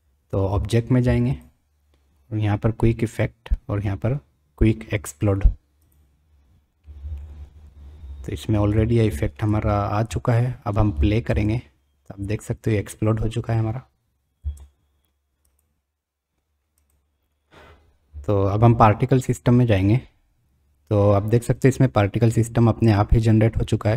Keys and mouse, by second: 1.3-6.2 drag, 7.1-7.7 middle drag, 7.9 middle click, 9.1 shift+middle click, 9.7 middle click, 10.3-10.6 shift+middle drag, 11.2 space, 12.0 click, 12.3 click, 14.6 space, 15.4 click, 16.8 click.